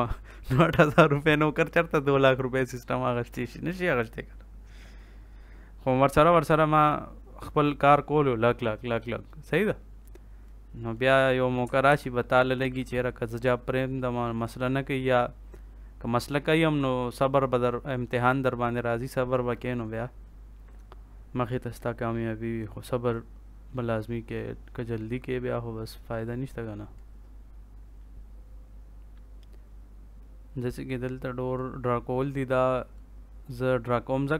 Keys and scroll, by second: 11.8 ctrl+s.